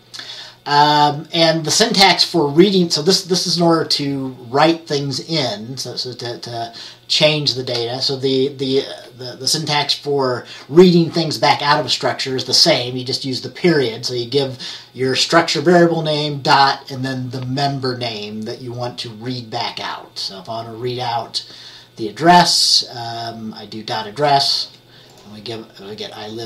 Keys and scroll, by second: 24.4 F10.